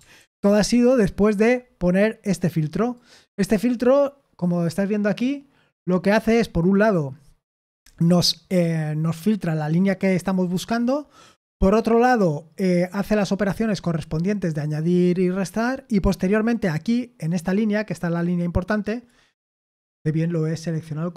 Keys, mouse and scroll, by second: 0.2 ctrl+p, 0.4 ctrl+p, 0.9 Return, 3.6 Escape, 3.6 click.